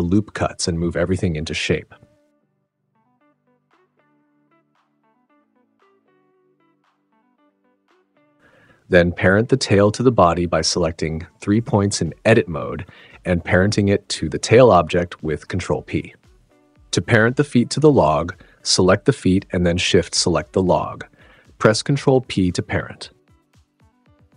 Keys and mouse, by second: 0.0 ctrl+r, 0.0 click, 0.4 click, 0.8 s, 1.2 click, 1.3 super+z, 1.6 s, 2.8 click, 2.9 s, 3.7 click, 4.1 s, 4.6 click, 4.7 click, 6.1-9.9 typing, 6.3 click, 6.9 Tab, 7.4 click, 9.2 click, 9.8 click, 10.1 click, 10.3 Tab, 11.5 click, 12.1-12.9 drag, 13.4 click, 13.8 ctrl+p, 15.0 Tab, 15.7 click, 16.5 alt+p, 18.9 alt+shift+p, 19.4 alt+p, 21.2 ctrl+p, 22.6 click, 23.1 ctrl+p, 23.6 g, 24.0 click, 24.1 super+z.